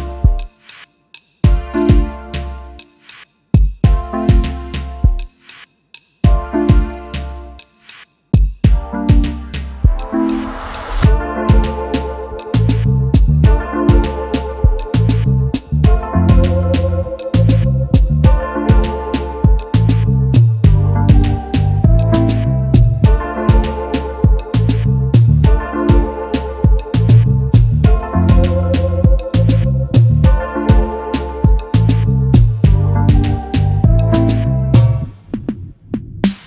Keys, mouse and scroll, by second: 7.5 ctrl+shift+], 9.1 alt+scroll up 1, 11.0 shift+click, 15.3 alt+scroll down 1, 17.1 alt+scroll up 1, 19.7 shift+click, 21.3 alt+scroll down 1, 22.1 space, 22.1 double click, 22.5 space, 25.9-26.6 alt+scroll up 1, 27.1 space, 27.2 double click, 27.7 alt+scroll up 1, 29.2 shift+click, 32.2 Left, 32.3 Left, 32.4 Left, 33.5 alt+scroll down 1, 34.4 space, 35.9 shift+click.